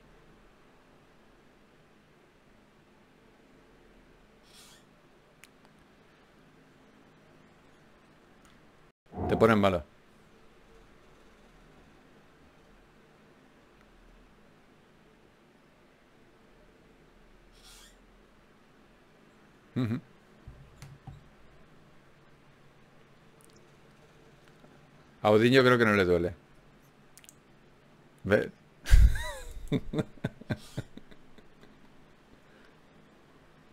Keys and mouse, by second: 0.0 f, 2.7 ctrl+r, 4.1 g, 5.7-7.7 drag, 6.1 g, 9.1 ctrl+r, 10.7 g, 14.5-16.9 right drag, 15.5 shift+q, 24.8 ctrl+Tab, 25.4-26.7 drag, 28.7 click, 29.4 ctrl+Tab, 30.4 click, 31.4 ctrl+x, 33.1 click.